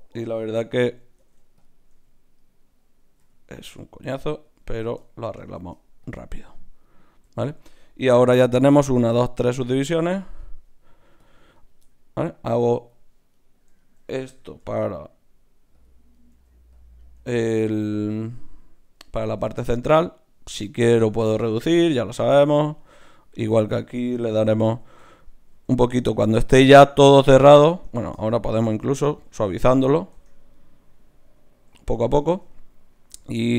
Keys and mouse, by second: 1.2 ctrl+Tab, 1.9 z, 2.4-4.4 drag, 3.2 g, 5.0-6.4 drag, 5.5 shift+q, 9.5 ctrl+r, 13.3-15.8 right drag, 14.6 g, 16.1-18.7 right drag, 16.3 g, 17.2 g, 18.2 g, 22.1 ctrl+Tab, 23.1 click, 23.2 right click, 24.4 f, 24.7 f, 25.0 f, 25.6 f, 27.7 Tab, 28.3-32.7 drag, 30.1 Tab.